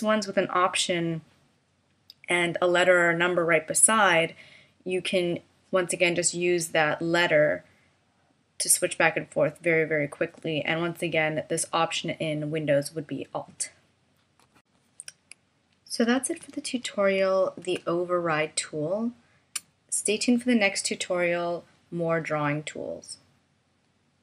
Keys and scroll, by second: 16.4 super+-, 17.8 space.